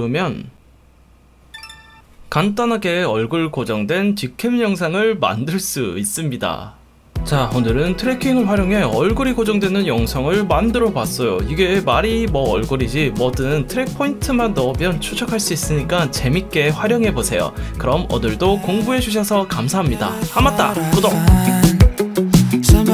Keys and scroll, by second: 1.9 space.